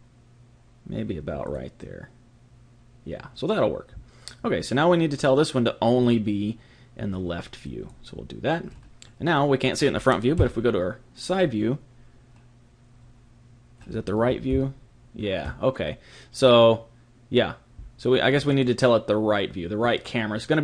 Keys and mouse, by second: 1.4 click, 6.0 click, 8.7-13.6 middle drag, 10.4 KP_3, 18.4 click.